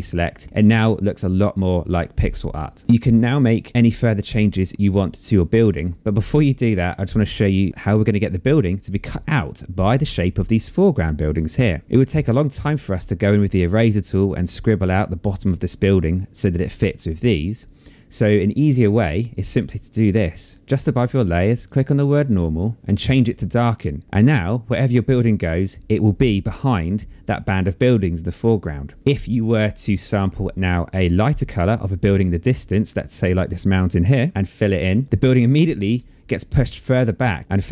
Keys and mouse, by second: 8.0 click, 10.7 click, 15.7 click, 16.8 click, 21.2 click, 23.0 click, 24.0 click, 30.4 click, 33.1 alt+click, 34.6 click.